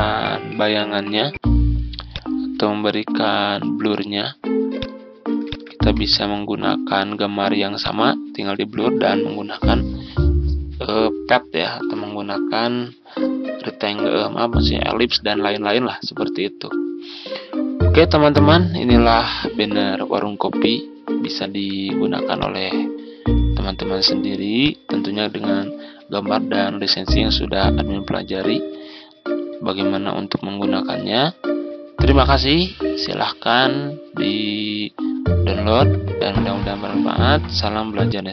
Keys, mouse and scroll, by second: 5.3 shift+click, 18.9 Delete, 21.3 z, 22.2 click.